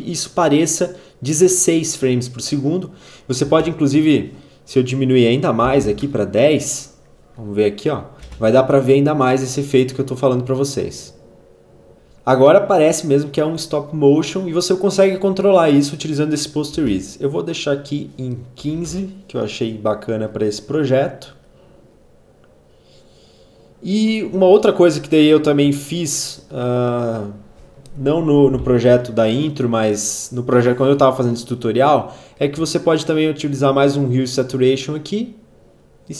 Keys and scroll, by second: 3.5 space, 5.2-6.1 typing, 8.0 space, 16.8 space, 18.4-19.3 typing, 27.6 h, 27.9 e.